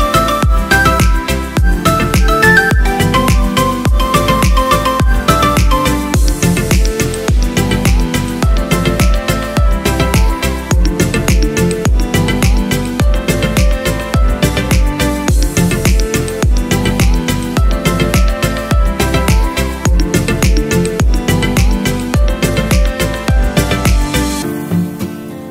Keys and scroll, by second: 20.4-23.3 typing.